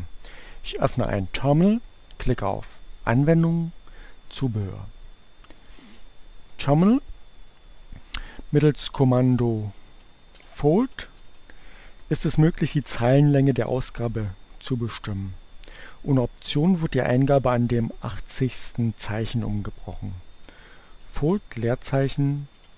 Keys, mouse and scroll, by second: 2.6 click, 5.4 click, 7.8-11.4 typing, 11.5 Return, 20.2-22.7 typing.